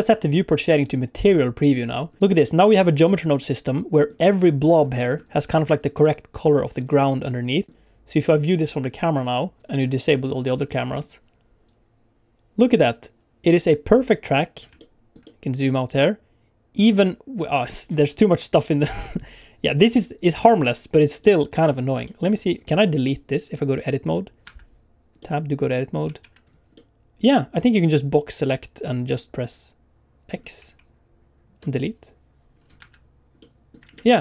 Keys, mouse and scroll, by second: 1.4 click, 1.9 middle click, 2.5 middle click, 4.4 click, 4.6 scroll up 3, 5.0 shift+middle click, 5.2-5.9 scroll down 4, 5.6 alt+a, 6.0 middle click, 6.8-7.1 scroll down 3, 7.2 middle click, 7.7 click, 9.6 shift+middle click, 9.6-10.7 scroll up 3, 11.1 click, 11.8 click, 14.8 ctrl+middle click, 16.0 click, 20.2 click, 21.2 middle click, 21.6-22.3 scroll down 5, 22.1 shift+middle click, 22.6 middle click, 24.8 Tab, 25.2 middle click, 26.1 alt+z, 26.5-26.8 scroll down 2, 26.8 middle click, 27.6 click, 29.1 middle click, 30.6 x, 32.6 scroll up 2, 33.1 Tab, 33.4 middle click, 33.9 alt+a, 34.0 middle click.